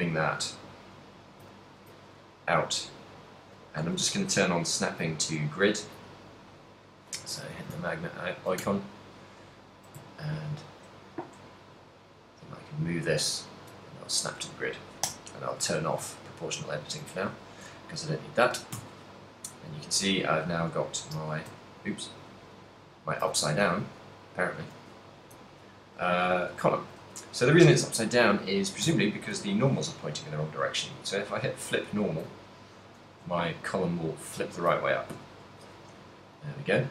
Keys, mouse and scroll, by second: 0.0 right click, 0.5 ctrl+middle click, 1.6 g, 3.7 right click, 5.0 click, 6.7 click, 7.7 g, 13.6 click, 14.1 shift+middle click, 15.2 o, 15.9 shift+middle click, 16.3 ctrl+middle click, 16.7 shift+middle click, 18.7 z, 19.1 middle click, 21.3 ctrl+n, 21.5 ctrl+n, 21.5 z, 22.4 z, 23.0 ctrl+n, 23.2 ctrl+n, 23.5 y, 24.0 x, 25.6 q, 26.4 middle click, 26.7 shift+middle click, 27.0 z, 29.0 w, 32.8 middle click, 33.1 z, 35.0 shift+middle click, 35.3 ctrl+middle click.